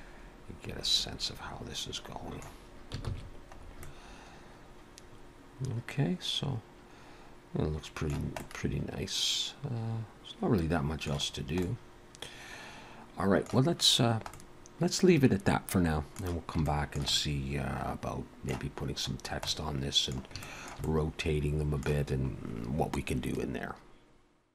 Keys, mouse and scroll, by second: 3.1 ctrl+s, 3.6-3.9 scroll up 2, 3.9 middle click, 8.4 middle click, 11.3 scroll down 1, 11.6 middle click, 14.6 middle click, 16.7 shift+middle click, 17.0 shift+middle click, 17.2 middle click, 19.2 scroll down 1, 19.5 middle click, 20.4 shift+middle click, 20.8 middle click.